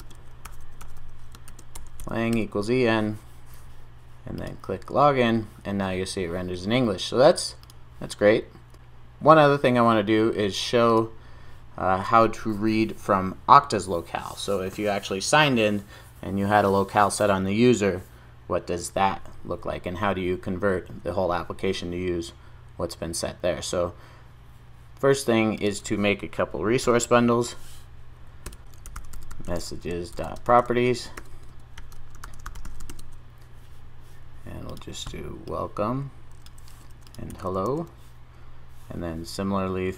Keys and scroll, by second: 27.0 super+n, 37.3 super+v.